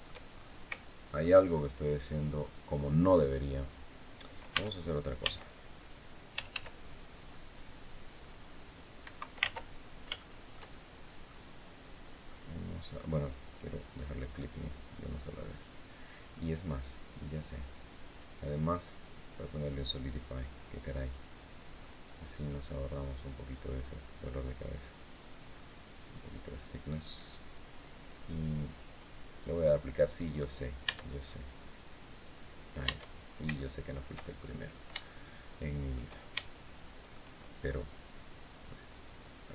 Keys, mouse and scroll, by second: 0.3 scroll up 2, 0.5 shift+click, 4.2-6.8 typing, 8.7 Escape, 9.6 ctrl+z, 9.6 ctrl+scroll down 3, 9.9-11.2 shift+middle drag, 12.0 middle click, 13.4 click, 14.6 scroll up 2, 17.8 click, 20.7 click, 21.5-22.9 middle drag, 25.6 click, 26.2 click, 28.8 click, 30.6 Tab, 31.7 click, 32.5 Tab, 33.3 shift+middle click, 34.1-34.7 shift+scroll up 2, 34.8-35.8 shift+middle drag, 36.1 shift+middle click.